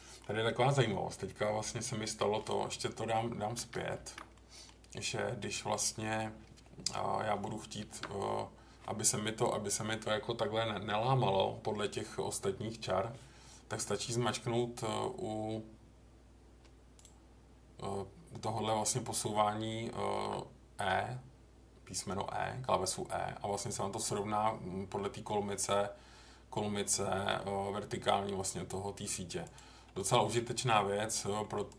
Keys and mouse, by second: 0.9-2.4 middle drag, 3.6 ctrl+z, 4.0 ctrl+z, 4.3 middle click, 7.8 ctrl+r, 20.1 e, 29.4 click, 31.4 middle click, 31.6 click.